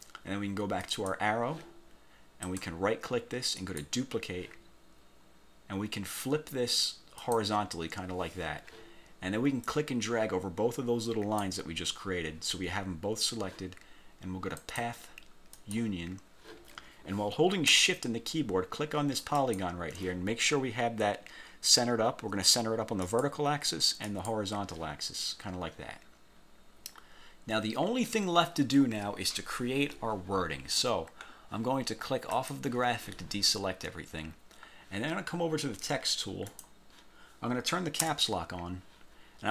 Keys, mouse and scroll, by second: 0.9 click, 2.5 click, 3.7 click, 7.3 click, 9.7-11.7 drag, 14.7 click, 15.6 click, 19.5 shift+click, 23.2 click, 24.2 click, 26.7 scroll down 1, 27.1 scroll up 1, 31.1 scroll down 1, 32.5 click, 34.2 scroll down 2, 36.6 click, 38.1 Caps_Lock.